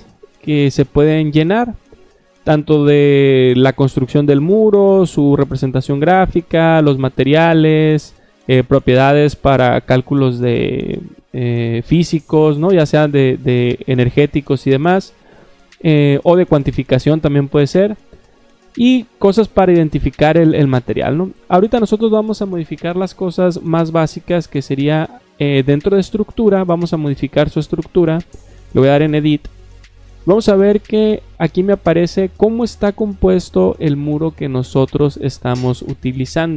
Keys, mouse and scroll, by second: 6.2 middle click, 6.2 scroll down 2, 12.6 middle click, 12.6 scroll down 2, 15.1 scroll down 1, 20.7-21.3 scroll up 2, 22.8 click, 28.7 click.